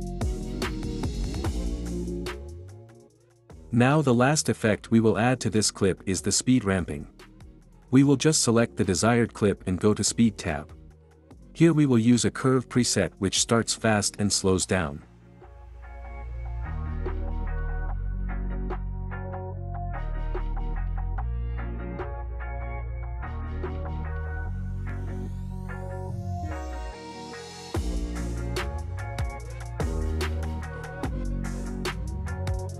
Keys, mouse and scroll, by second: 0.2 space, 1.5 space, 2.1-3.1 drag, 25.0 click, 25.3 space.